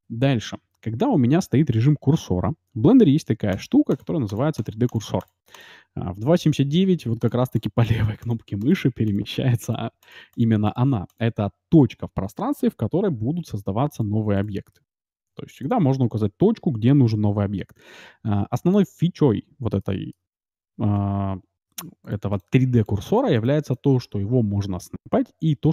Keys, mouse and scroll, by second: 3.5-13.0 drag, 12.9 shift+a, 14.3-16.1 drag, 14.7 shift+a, 19.8-21.6 middle drag, 22.0-25.5 drag.